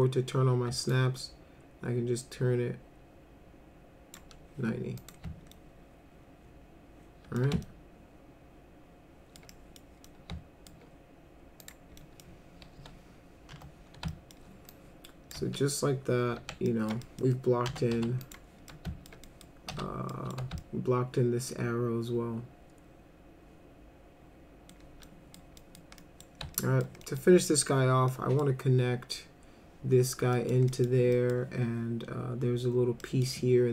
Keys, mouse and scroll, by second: 0.9-4.1 shift+drag, 5.0 click, 5.5-7.4 alt+middle drag, 7.6-9.4 alt+middle drag, 9.5 middle click, 10.1 alt+middle click, 11.6 click, 12.0 middle click, 12.8 p, 13.5 F3, 14.1 alt+middle click, 14.7 click, 16.4 alt+q, 16.7 alt+middle click, 17.0 middle drag, 17.7 F3, 18.0 F4, 18.2 click, 18.7 alt+middle click, 19.3 middle drag, 19.7 F4, 20.1 middle drag, 20.6-24.7 alt+middle drag, 25.0 middle click, 25.6 middle click, 26.0 middle click, 26.5 alt+middle click, 27.1 middle drag, 28.1 middle click, 30.3 middle click, 30.7 middle click, 31.1 middle click, 33.0 middle click.